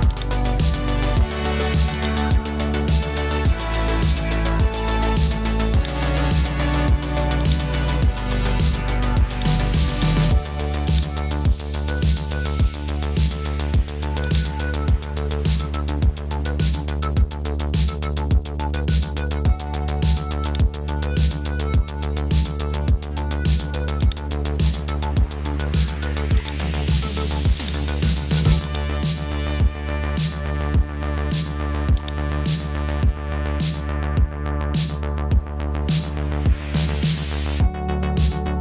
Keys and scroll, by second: 17.1-18.6 typing, 19.7 typing, 21.3-21.6 typing, 28.4-29.4 typing, 35.1-36.5 typing.